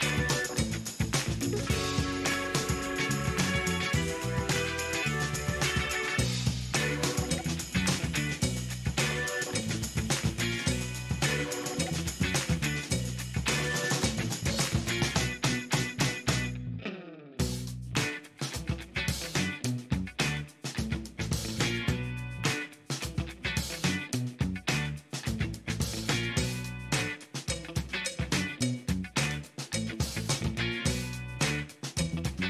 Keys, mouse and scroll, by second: 0.4-1.9 drag, 2.4 click, 3.2 click, 4.9 click, 5.9 click, 6.6 shift+right click, 9.6 click, 11.7 click, 13.2 click, 14.9 shift+right click, 17.2 click, 18.1 shift+middle click, 20.5 shift+middle click, 23.0 click, 23.8 click, 24.7 shift+middle click, 26.0 shift+scroll down 2, 26.4 shift+middle click, 27.2 shift+right click, 28.1 shift+middle click, 29.5 shift+right click.